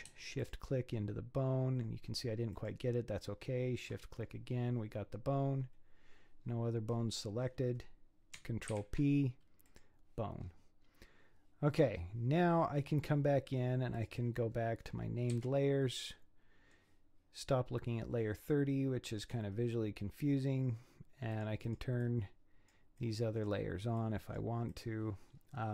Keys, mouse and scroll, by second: 0.4 shift+click, 2.5-4.1 shift+drag, 4.1-6.4 scroll down 9, 6.4-6.9 scroll down 5, 6.9-8.7 scroll up 13, 8.7 ctrl+p, 10.3-13.9 scroll down 9, 14.0 click, 15.3 z, 16.1-19.1 middle drag, 21.3 click, 22.0-25.2 drag, 25.2-25.7 scroll down 6.